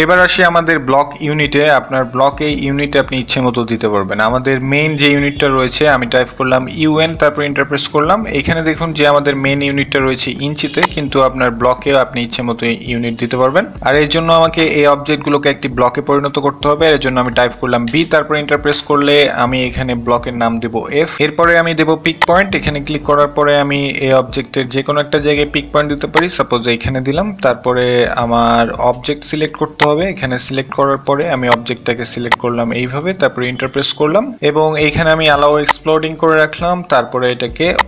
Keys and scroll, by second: 9.0-10.0 typing, 16.9 b, 17.1 Return, 21.7 f, 31.9 e.